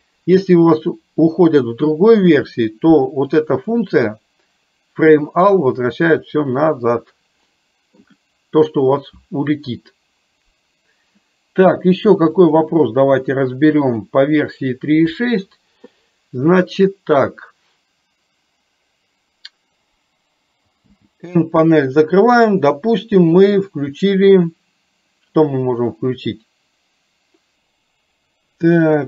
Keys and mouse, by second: 3.8-6.2 drag, 7.7 middle click, 12.4-14.3 drag, 28.8-29.0 middle drag.